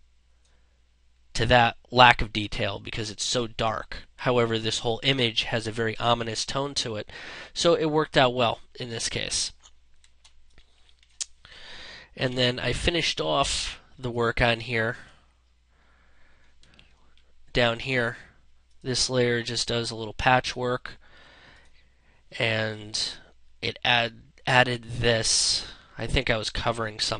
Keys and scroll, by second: 9.6 space, 12.0 ctrl+0, 16.2 ctrl+space.